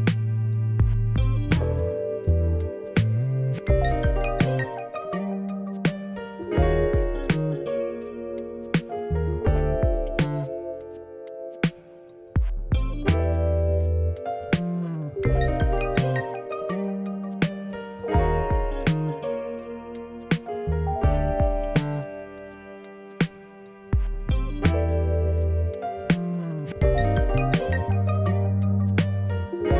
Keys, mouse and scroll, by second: 0.0 Tab, 1.9 ctrl+Tab, 4.2-6.4 drag, 6.4 shift+middle click, 13.9 click, 15.1-21.4 drag, 21.6 click, 22.2-27.0 middle drag, 22.6 scroll down 1, 24.3-24.8 scroll up 4, 25.0 scroll down 2, 27.0 click, 27.6 middle click, 27.7 scroll down 1, 27.9 middle click, 28.1 scroll up 1, 28.4 middle click, 29.2 scroll up 1, 29.3 middle click.